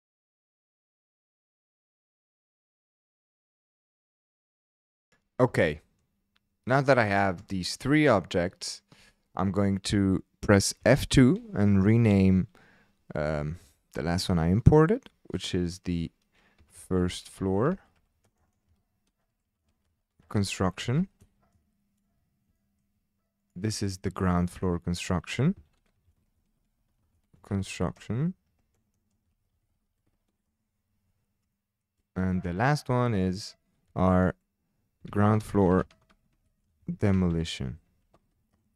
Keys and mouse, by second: 0.3 click, 1.4 click, 1.6 shift+click, 1.8 s, 1.8 KP_1, 1.9 KP_Enter, 1.9 KP_0, 5.1 click, 5.6-6.0 shift+drag, 7.5-8.0 shift+drag, 10.8 F2, 18.4 BackSpace, 18.5 BackSpace, 19.4 o, 22.6 shift+drag, 23.5 click, 23.8 shift+drag, 24.6 F2, 26.8 o, 28.9 BackSpace, 31.5 shift+click, 33.1 click, 33.9 F2, 36.2 o.